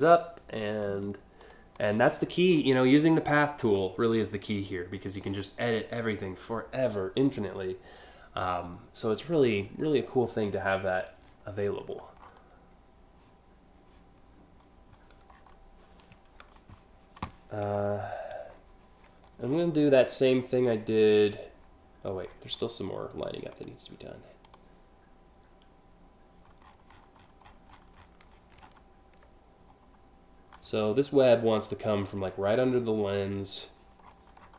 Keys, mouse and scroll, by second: 0.4 click, 1.0 click, 1.4 click, 1.9-2.3 scroll up 4, 3.0-3.3 alt+scroll down 2, 4.9 scroll up 1, 10.3 scroll up 2, 11.5 scroll up 1, 11.8 scroll down 1, 15.1 scroll down 2, 17.4-18.3 alt+scroll up 4, 19.1-19.9 scroll up 3, 21.9-22.4 scroll up 2, 23.2 click, 24.1 click, 26.3-28.4 scroll up 12, 29.4-29.7 scroll down 2, 33.7-34.2 scroll down 3, 34.3-34.5 scroll up 3.